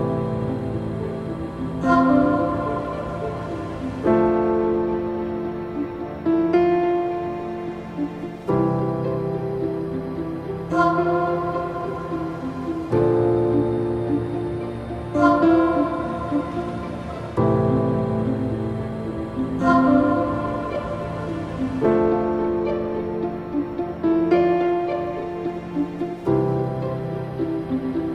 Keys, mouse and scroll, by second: 5.1 click, 6.5 click, 7.7-10.8 drag, 12.2-15.9 drag, 15.9 a, 20.6-22.7 drag, 22.7-23.0 scroll up 3, 23.3-26.3 middle drag, 27.3-27.8 scroll down 3, 28.0-28.1 shift+middle drag.